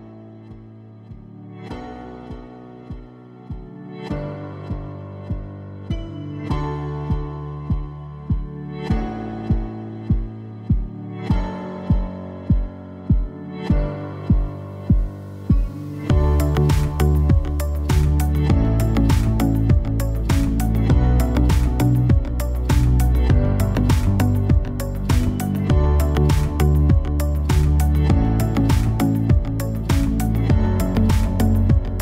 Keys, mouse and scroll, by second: 0.6 click, 2.3-3.0 right drag, 3.1 click, 3.6-4.5 right drag, 4.5 click, 5.0-5.7 drag, 5.9-7.3 drag, 7.2-8.3 right drag, 7.5-8.3 drag, 8.4-10.3 right drag, 10.3 ctrl+j, 11.1-11.5 drag, 11.4-12.7 right drag, 12.7 click, 13.2-13.8 right drag, 13.8 ctrl+p, 15.4-16.2 drag, 16.3-16.7 right drag, 16.4-17.8 middle drag, 17.8-18.9 drag, 18.0-18.9 middle drag, 20.6 Delete, 21.1 Delete, 21.5 Delete, 22.3 Delete, 23.1 click, 23.6 alt+p, 25.0-25.4 right drag, 25.7-26.5 middle drag, 27.0 shift+s, 27.7-28.1 drag, 28.1 ctrl+alt+shift+c, 29.0-29.3 drag, 29.3-29.8 right drag, 29.8 ctrl+p, 30.4-31.4 drag.